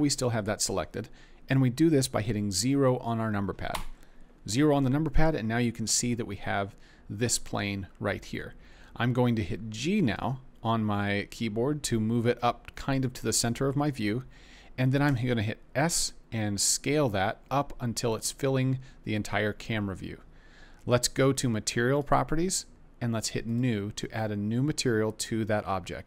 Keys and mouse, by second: 3.7 KP_0, 10.1 g, 15.0 s, 18.1 click, 23.4 click.